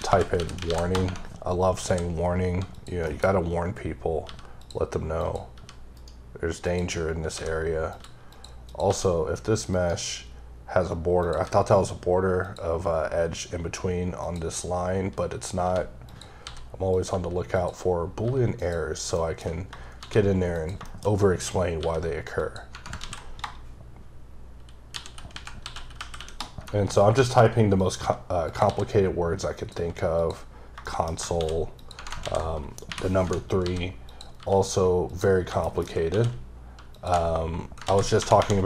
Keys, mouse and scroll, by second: 1.0 Tab, 2.7 click, 3.1 KP_Decimal, 3.5-3.8 scroll up 2, 4.2 g, 4.6 click, 5.2 click, 5.5 g, 5.9 right click, 6.6 click, 7.2 click, 7.3 s, 7.9 click, 8.0 g, 8.3 click, 8.6 click, 8.8 g, 9.7 right click, 10.1-10.6 scroll down 3, 10.6-11.2 scroll up 5, 11.2 click, 11.3 g, 12.4 click, 12.8 g, 14.2 click, 15.3-15.6 scroll down 2, 15.6 g, 16.0 click, 16.4 s, 16.9 click, 17.1 g, 17.5 click, 17.8-18.2 scroll down 3, 18.2 g, 18.6 click, 19.2 shift+middle click, 19.4-20.0 shift+scroll down 3, 20.0 shift+d, 20.5 click, 20.8 shift+middle click, 21.0-21.8 shift+scroll up 4, 21.8 g, 22.4 click, 27.7 click, 28.0 g, 28.5 click, 28.7 s, 29.5 click, 29.7 g, 30.2 click, 30.5 scroll down 3, 30.8 shift+middle click, 31.4 shift+d, 31.8 click, 31.9 Tab, 34.1 click, 34.4 g, 35.1 click, 35.6 shift+KP_1, 36.1 shift+d, 36.9 click, 37.0 q, 37.1 q, 37.8 ctrl+a.